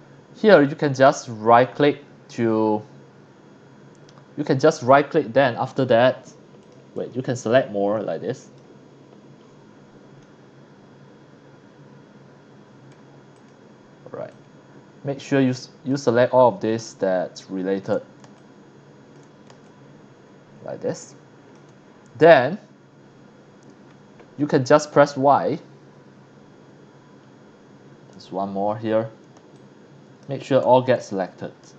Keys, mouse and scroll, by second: 0.9 right click, 5.7 right click, 6.6 click, 6.9-8.1 drag, 9.4 scroll up 2, 10.2-12.7 middle drag, 13.4 click, 14.3-15.9 drag, 16.8 shift+click, 18.4 shift+click, 19.6-21.5 shift+drag, 23.0 middle click, 27.2 scroll up 1, 29.5 shift+click, 30.9 scroll down 2, 31.6 middle click.